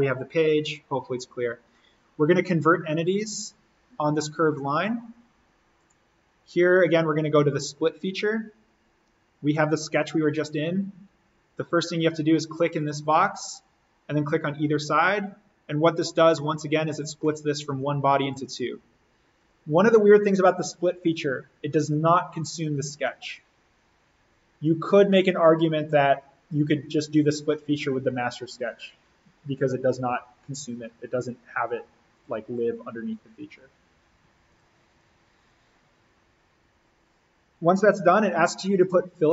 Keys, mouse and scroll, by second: 3.4 click, 5.8 click, 12.6 click, 15.9-16.4 scroll down 1, 16.4-18.2 middle drag, 18.2 click, 23.8 click, 24.2-25.1 scroll up 1, 25.1 click, 32.2 click, 35.2 click.